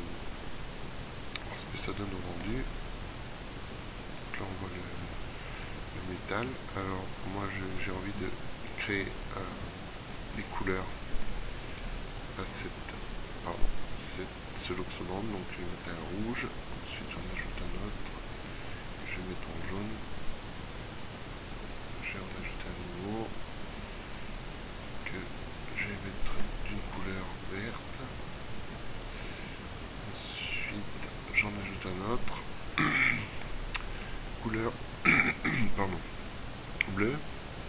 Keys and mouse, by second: 3.8-6.4 middle drag, 13.8-15.0 middle drag, 17.3-19.1 middle drag, 19.1-20.5 drag, 22.4-23.5 drag, 28.4-29.9 middle drag.